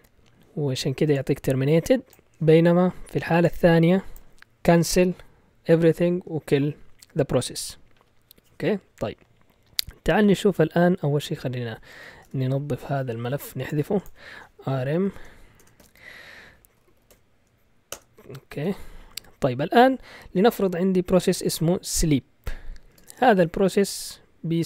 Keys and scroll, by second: 10.2 ctrl+l, 11.5-12.4 typing, 14.3-18.4 typing, 18.6 ctrl+l, 21.1-24.6 typing.